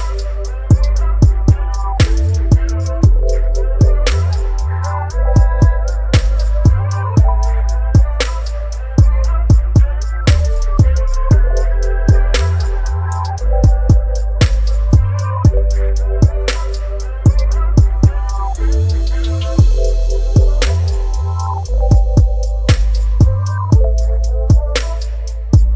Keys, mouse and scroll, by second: 2.3 click, 2.6 shift+l, 3.2 shift+o, 4.4 shift+r, 5.3 shift+m, 6.5 ctrl+a, 8.3 click, 12.8 click, 16.4 click, 19.8 v, 20.2 ctrl+t, 22.9-25.7 drag.